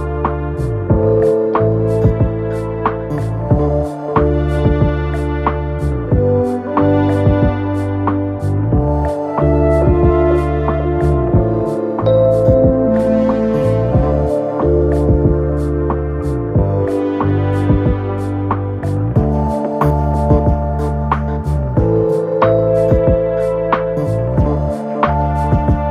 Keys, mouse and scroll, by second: 8.5 typing, 17.7 typing.